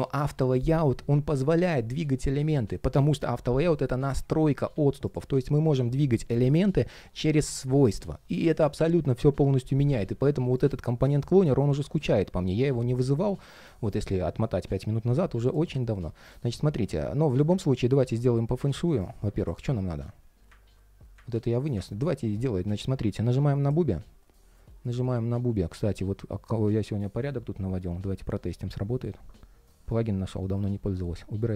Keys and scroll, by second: 16.4 ctrl+shift+3, 19.3 ctrl+shift+3, 19.7 ctrl+shift+3, 30.5 super+/.